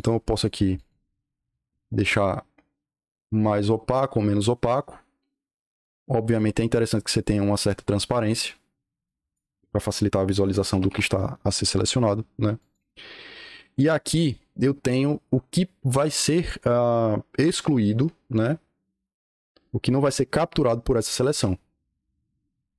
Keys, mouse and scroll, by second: 0.4 click, 0.7 click, 1.7-8.3 drag, 8.9 click, 10.6 KP_2, 10.8 KP_5, 12.5 click.